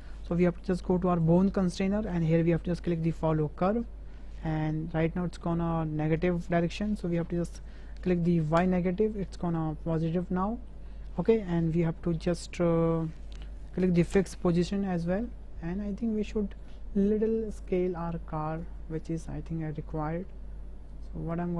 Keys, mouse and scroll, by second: 1.2 click, 3.5 click, 5.2-5.7 middle drag, 8.6 click, 9.4-10.7 middle drag, 10.9 shift+middle drag, 14.2 middle click, 15.0 middle drag, 15.7-16.2 middle drag, 17.8-18.8 drag, 20.2 s, 21.3 click.